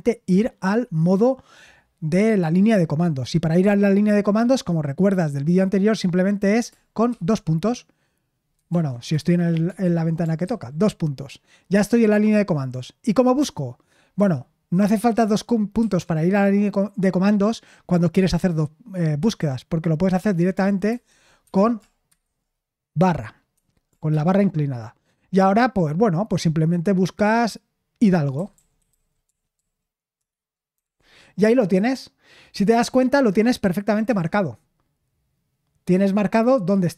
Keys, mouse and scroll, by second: 8.7 super+l, 9.8 super+l, 10.5 shift+;, 14.2 Escape, 20.9 /, 21.5 Escape, 22.1 /, 23.5 Escape, 24.1 /, 28.1-31.3 typing, 34.1 Return.